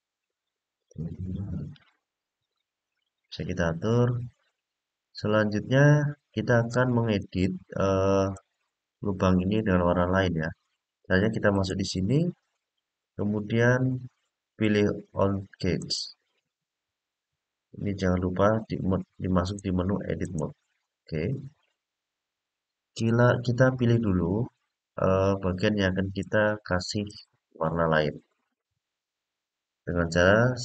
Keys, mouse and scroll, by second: 3.8 click, 4.6 click, 6.9-8.1 middle drag, 11.3 click, 15.5 click, 19.2-20.1 drag, 21.3-21.6 scroll up 1, 22.7-24.7 scroll up 1, 24.7-25.9 middle drag, 26.8 click.